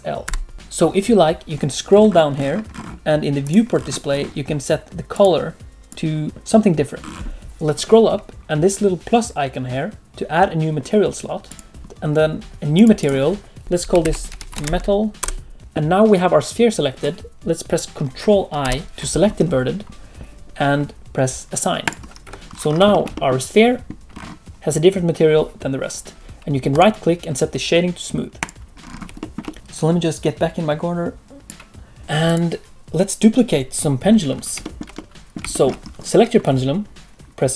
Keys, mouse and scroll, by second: 0.2 l, 1.5-3.4 scroll down 18, 3.4 click, 3.4-5.1 scroll down 7, 5.1 click, 5.1-5.8 scroll down 1, 6.2-7.0 scroll down 1, 7.0-7.6 scroll up 23, 11.4 click, 12.7 click, 12.9 click, 13.6 BackSpace, 18.6 ctrl+i, 21.8 click, 22.2 Tab, 22.4-22.9 scroll down 7, 22.9 shift+middle click, 23.1 middle click, 24.1-24.8 scroll up 1, 24.8-25.2 scroll up 3, 26.7 right click, 28.7-29.2 scroll down 6, 29.2 shift+middle click, 29.4 middle click, 32.2 click, 34.3 scroll up 1, 34.6 shift+middle click, 34.9 middle click, 35.5 shift+middle click.